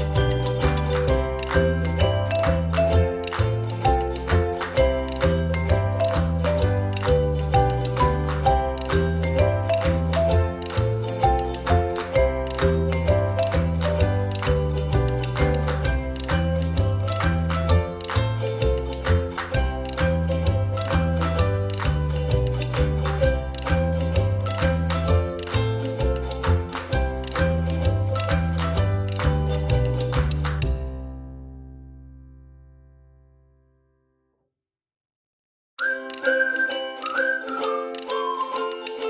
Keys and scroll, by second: 3.5 ctrl+d, 5.4 _, 10.0 a, 10.8 Left, 11.0 Left, 11.3 Left, 12.1 Right, 12.3 Right, 12.5 Right, 22.9 Delete, 24.8 p, 36.8 Delete.